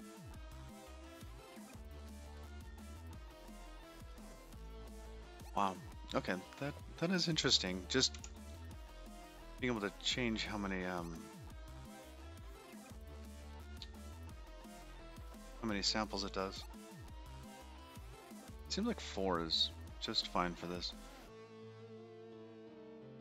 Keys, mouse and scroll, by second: 1.3 click, 1.8 scroll down 3, 3.0-3.8 scroll up 5, 5.9 middle click, 8.8 n, 14.7 middle click, 20.0 middle click.